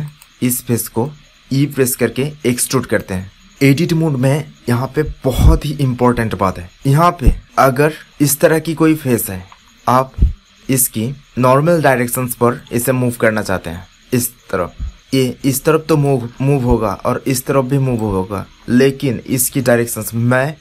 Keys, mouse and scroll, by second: 1.4 e, 7.4-8.6 drag, 8.8 middle click, 9.9 middle click, 16.2 ctrl+z, 18.1 ctrl+z.